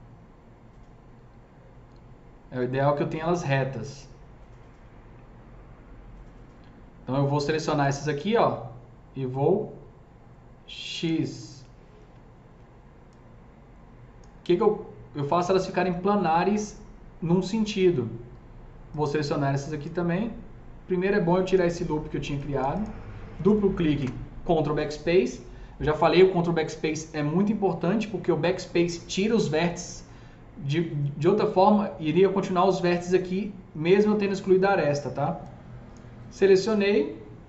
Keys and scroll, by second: 23.9 ctrl+BackSpace.